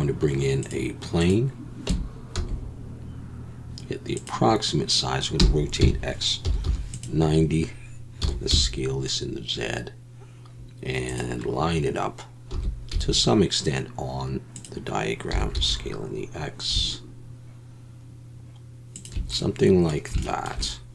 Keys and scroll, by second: 1.9 Tab, 2.3 s, 5.4 r, 5.8 x, 6.4 9, 6.6 0, 8.2 s, 8.5 z, 12.5 s, 12.9 z, 15.3 s, 15.5 x.